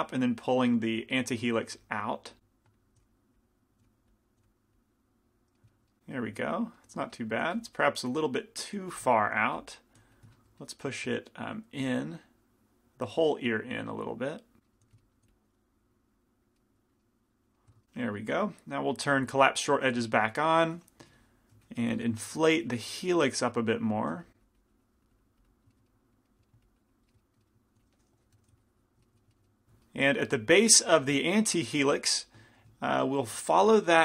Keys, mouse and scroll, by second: 1.8 f, 3.0 f, 3.9 f, 4.5 f, 7.6 f, 7.8-9.7 drag, 8.9 f, 9.6 f, 10.2 f, 12.3-17.1 drag, 12.3 right click, 14.7-15.8 right drag, 14.9 f, 15.3 middle click, 15.3 f, 16.6-19.9 middle drag, 16.6 right click, 19.3-20.9 drag, 19.3 right click, 19.9 f, 20.3 middle click, 20.3 right click, 20.9-23.3 middle drag, 21.3 i, 21.7 f, 22.7 f, 23.3-26.3 drag, 25.8 right click, 26.3 middle click, 26.7-27.8 drag, 26.7 right click, 27.7 middle click, 27.8 f, 28.2 i, 28.4 f, 28.6-30.1 drag, 30.1-31.5 middle drag, 30.9 f, 32.0 f, 33.9 i.